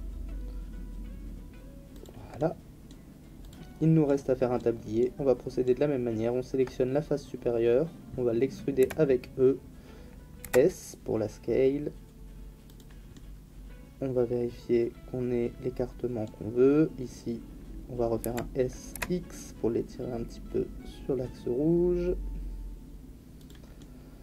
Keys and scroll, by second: 8.8 e, 10.4 s, 18.2 s, 18.9 x.